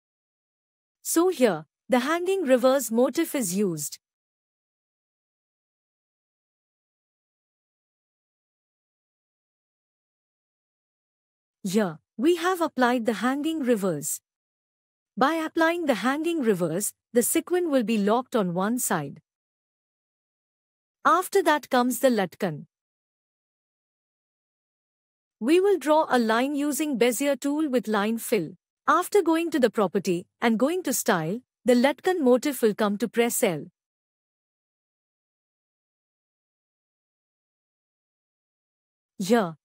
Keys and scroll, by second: 27.8 F6.